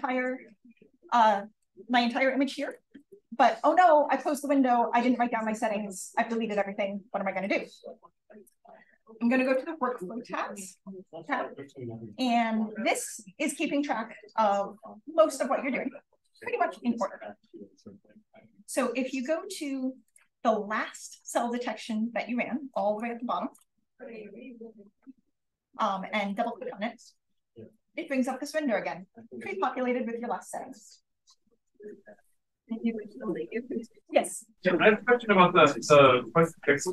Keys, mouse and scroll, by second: 1.8-5.6 scroll up 1, 2.2 click, 2.9 click, 5.6-8.9 scroll up 1, 8.9-10.7 scroll up 1, 9.4 click, 10.7-12.1 scroll up 1, 12.1-15.8 scroll down 1, 15.8-17.6 scroll down 1, 20.1 click, 22.9 click, 26.2 click, 26.3 click.